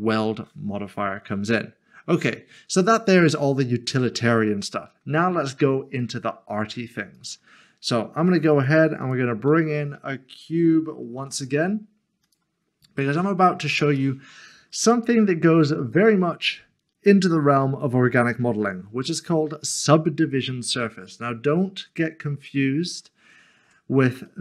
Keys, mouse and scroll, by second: 3.2 middle click, 7.1 middle click, 8.6 click, 11.2 a, 12.4 click, 13.1 scroll down 1, 14.0 middle click, 23.3 scroll up 1, 23.7 Tab, 24.3 middle click.